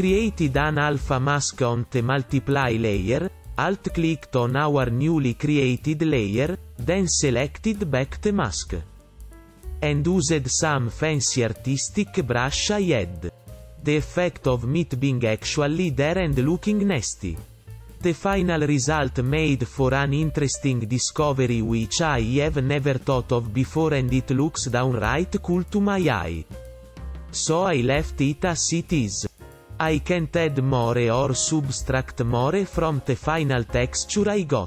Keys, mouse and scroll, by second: 0.0 ., 4.0 right click, 4.2 right click, 5.9 right click, 6.6 right click, 6.8 right click, 7.6 right click, 8.0 right click, 8.6 ctrl+alt+], 8.8 right click, 9.1 right click, 9.3 right click, 10.8 ., 12.1 ctrl+alt+], 14.6 right click, 14.8 ,, 15.6 right click, 16.7 ,, 17.1 ,, 17.8 right click, 18.3 ,, 18.9 right click, 20.8 right click, 22.3 right click, 22.9 ,, 23.7 ., 24.3 right click, 24.6 ,, 24.8 right click, 27.8 right click, 28.0 ,.